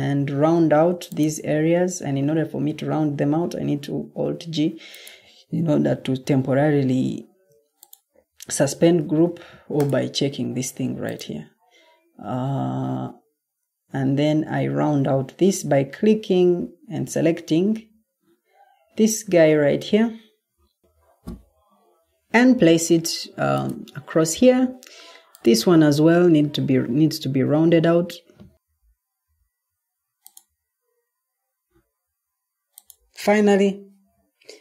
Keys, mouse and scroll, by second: 0.7 Escape, 1.7 Escape, 3.6 alt+g, 7.2 Escape, 8.9 Escape.